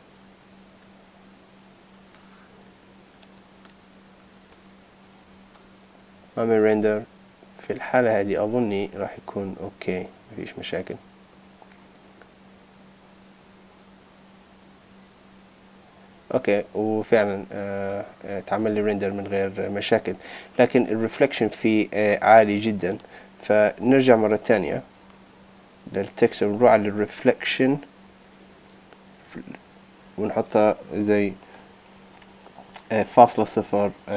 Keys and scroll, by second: 5.3 super+s.